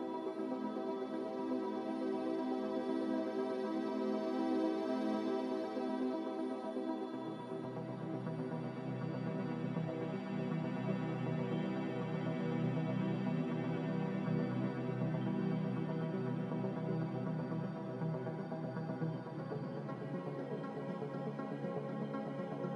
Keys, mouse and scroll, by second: 2.2 typing, 2.4 Return, 4.9 Return, 10.0 ctrl+z, 10.4 ctrl+z, 16.4 a, 19.7-20.5 typing.